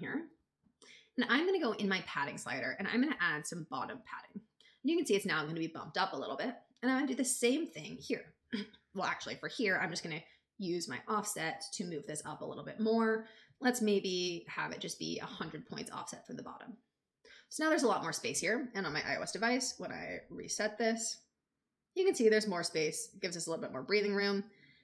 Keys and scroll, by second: 10.1 shift+Up, 13.7 alt+Up.